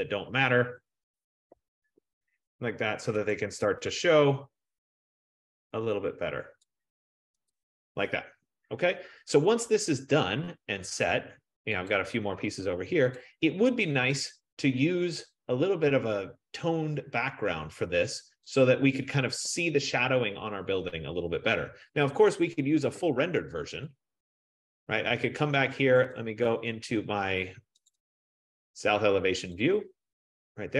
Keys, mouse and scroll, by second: 1.6 BackSpace, 3.3 click, 6.7 click, 7.8 click, 9.5-10.3 scroll, 12.1 click, 13.2 click, 18.6 click, 19.5 BackSpace, 24.6 click, 26.3 click, 27.9 click, 28.4 click, 29.6 click, 30.3 click.